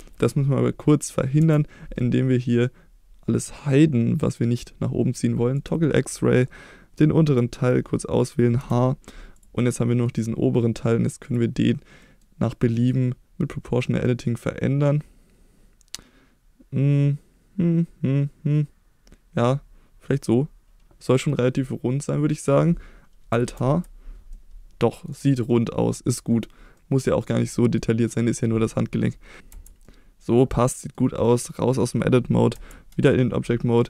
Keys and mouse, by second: 1.4 KP_1, 5.6 click, 6.6 click, 8.6 h, 9.4 click, 9.8 middle click, 11.2 click, 12.1 middle click, 12.8-20.2 drag, 21.3-22.5 middle drag, 23.5 alt+h, 24.3 middle click, 25.5 middle click, 26.8 middle click, 27.5 middle click, 29.5 Tab, 29.8 middle click, 30.5 middle click, 31.4 middle click.